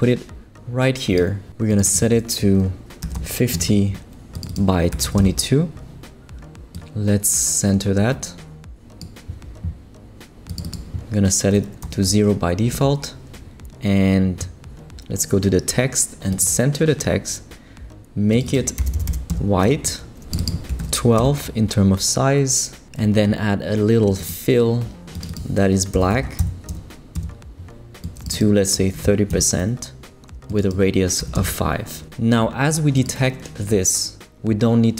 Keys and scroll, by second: 2.8-3.6 typing, 4.9 2, 5.2 Return, 11.8 0, 12.7 Escape, 18.8 f, 19.3 Return, 20.5-21.3 typing, 25.9 0, 27.1 Return, 28.7-29.5 typing, 31.2 5, 31.3 Return.